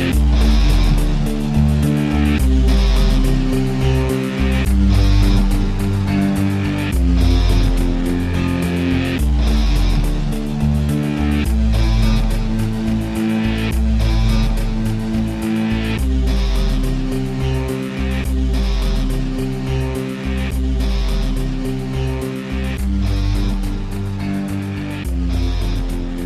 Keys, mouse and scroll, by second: 0.3 middle click, 0.6-1.6 drag, 2.8 g, 4.1 middle click, 4.3-6.8 drag, 7.0-8.0 drag, 8.2-8.7 alt+right drag, 8.7-9.5 alt+middle drag, 9.5 alt+right click, 9.9 alt+middle click, 10.5 click, 10.8 KP_Decimal, 11.1 click, 11.2 alt+middle click, 11.7 r, 13.2-16.6 alt+middle drag, 16.6 r, 18.2-19.3 alt+right drag, 19.3 alt+middle click, 19.6 alt+click, 20.6 alt+middle click, 21.5 scroll down 3, 21.6 shift+drag, 21.8 g, 23.4 click, 24.2 middle drag, 24.5-26.1 drag.